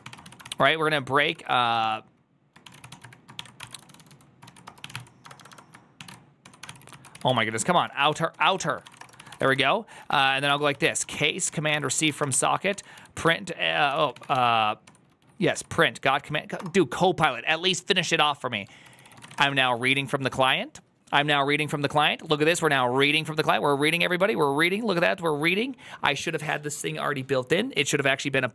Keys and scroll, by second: 0.0-14.7 typing, 0.5 ctrl+c, 13.1 Tab, 15.4 Tab, 16.5 space, 17.4 Tab, 18.7 ctrl+c, 18.8-20.2 typing.